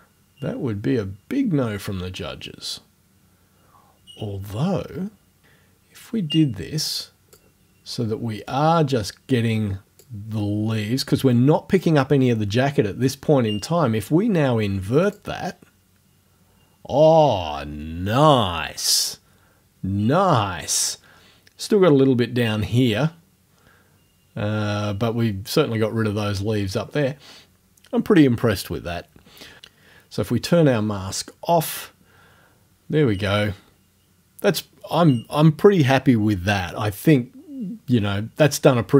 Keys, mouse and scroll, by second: 8.5-10.2 drag, 15.0 click.